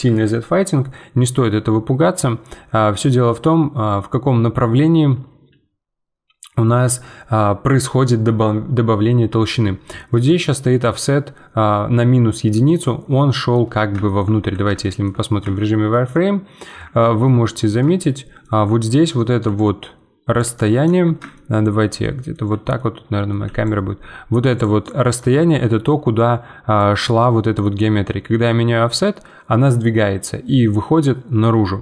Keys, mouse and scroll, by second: 10.3-13.3 drag, 13.3-14.4 middle drag, 14.4 z, 14.8 shift+middle click, 15.2 scroll up 2, 15.5-16.8 shift+middle drag, 16.8 scroll up 1, 17.0 shift+middle click, 17.4-17.9 scroll up 6, 17.9-19.4 shift+middle drag, 19.4 d, 19.5 click, 20.4-21.2 d, 21.3-22.5 shift+middle drag, 22.5 d, 22.7 d, 22.7 middle click, 23.3 d, 23.3 d, 23.6-24.6 drag, 24.6 d, 24.8 right click, 25.2 d, 26.8-31.8 drag.